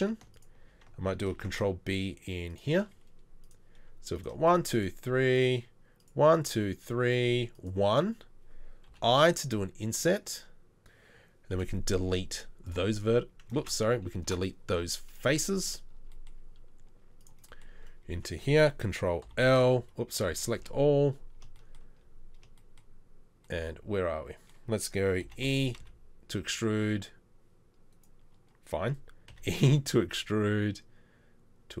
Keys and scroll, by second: 1.4 ctrl+b, 11.5 Delete, 12.8 Delete, 13.6 ctrl+z, 14.3 Delete, 19.3 ctrl+l, 20.3 a, 20.6 KP_7, 25.3 g, 29.3 e.